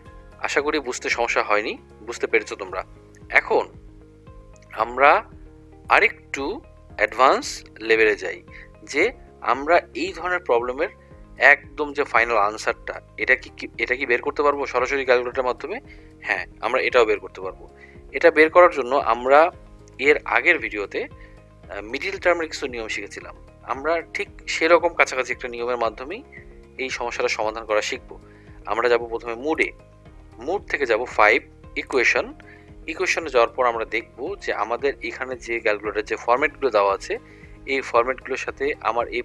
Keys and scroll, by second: 7.1 1, 32.0 5.